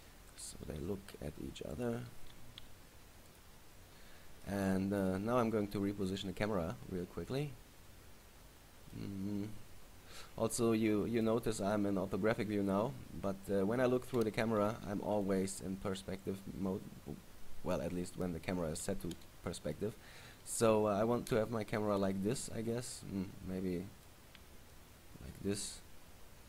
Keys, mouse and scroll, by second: 0.6 click, 0.8 r, 2.0 click, 2.3 g, 3.5 click, 4.6 middle click, 5.3-6.2 scroll up 3, 6.2 scroll up 2, 6.2 middle click, 9.2-9.6 scroll up 2, 9.6-10.2 scroll down 2, 10.2-10.8 scroll down 2, 13.1 scroll up 1, 22.8-23.1 scroll up 2, 23.1 middle click, 24.9 shift+middle click, 25.7 middle click.